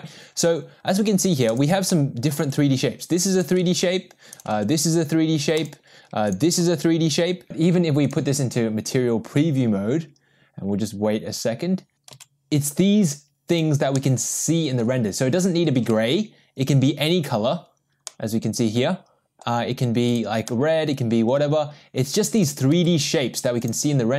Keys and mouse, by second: 1.5 click, 1.9-2.3 middle drag, 2.4 g, 3.8 ctrl+z, 4.3 click, 5.7 g, 8.3 click, 13.5 g, 14.0-14.8 middle drag, 18.2 ctrl+z, 18.2-19.4 middle drag, 20.1 click, 20.5-21.4 middle drag, 22.4 click, 22.8 g.